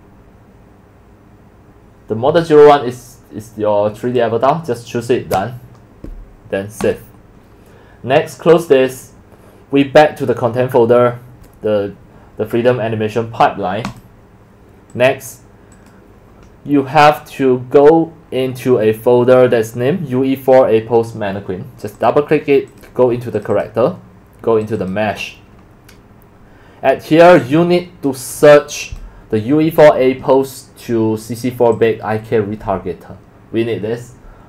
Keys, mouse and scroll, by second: 4.0 click, 4.7 click, 5.8 click, 6.8 click, 7.4 click, 13.9 click, 14.9 click, 21.8 click, 22.0 click, 23.4 click, 23.5 click, 24.6 click, 27.7-28.1 scroll down 2, 31.8-32.3 drag.